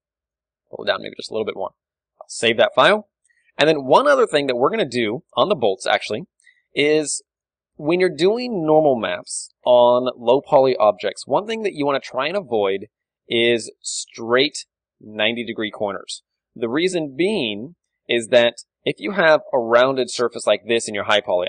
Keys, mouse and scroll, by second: 0.5 click, 0.5 g, 0.9 middle click, 1.3-3.0 drag, 1.4 a, 1.9 ctrl+w, 3.0-14.4 middle drag, 6.4 KP_1, 14.1-16.5 d, 14.4-16.3 drag, 19.2-21.4 d, 19.6-21.4 drag.